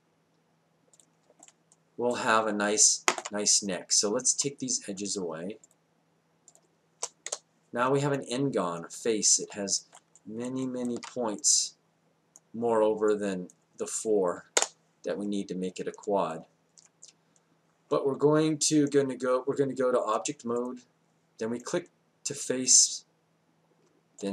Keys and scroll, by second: 7.3 Delete, 8.8 Delete, 14.5 Delete.